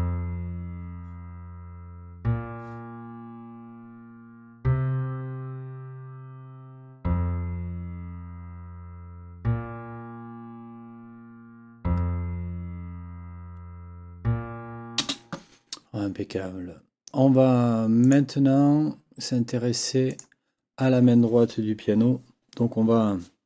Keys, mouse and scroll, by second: 15.0 space, 18.0 click, 20.1 click.